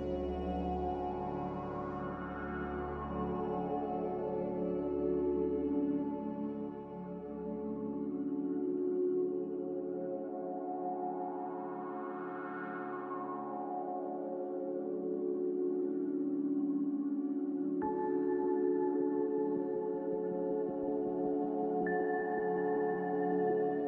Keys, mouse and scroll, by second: 11.0 ctrl+b, 15.3 a, 16.9 5, 17.2 Return, 18.4 1, 18.6 Return, 19.5 click, 23.5 click.